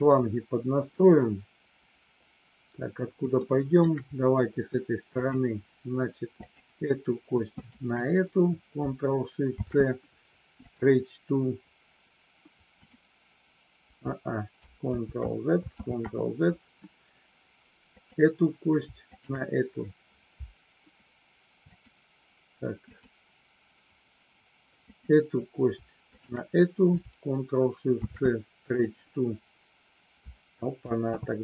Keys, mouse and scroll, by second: 3.3 shift+middle click, 6.3 click, 7.6 shift+click, 9.4 ctrl+shift+c, 15.0 ctrl+z, 15.8 ctrl+z, 19.1 shift+click, 21.7 click, 26.1 shift+click, 27.8 ctrl+shift+c, 31.2 ctrl+z.